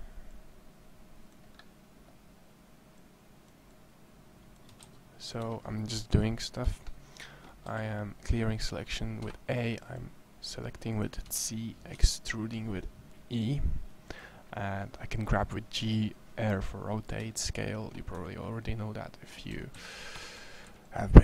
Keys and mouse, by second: 4.6 a, 4.7 c, 7.5 a, 8.9 a, 10.7 c, 11.7 e, 14.0-15.8 drag, 17.9 a, 19.3 a, 19.6 c, 20.2 a, 20.5 c.